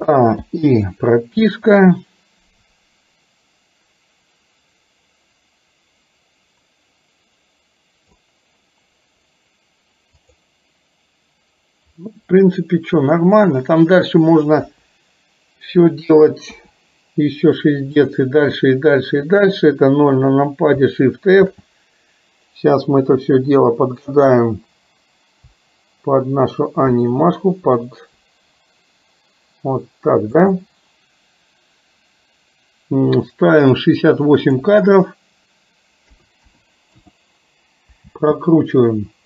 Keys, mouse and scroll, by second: 0.5 i, 1.7-8.2 drag, 10.4 click, 14.6 KP_3, 16.5 KP_0, 18.1 click, 21.5 shift+f, 34.5-37.1 drag, 38.1 space.